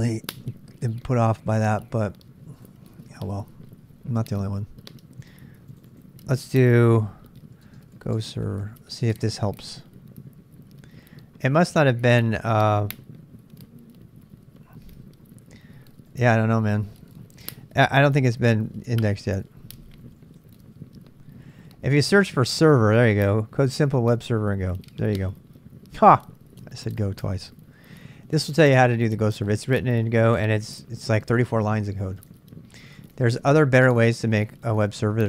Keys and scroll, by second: 7.3-9.5 typing, 18.1 Delete, 18.8-20.7 typing, 33.0 super+Tab, 33.1 super+Tab.